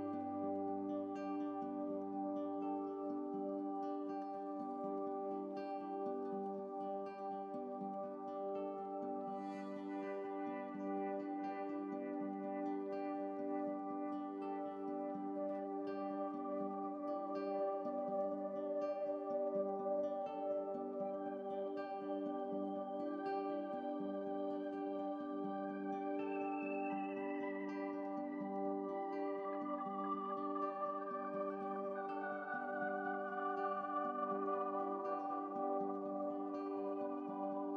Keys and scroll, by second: 0.2 ctrl+z, 1.0 ctrl+shift+z, 1.3 ctrl+shift+z, 37.2 b.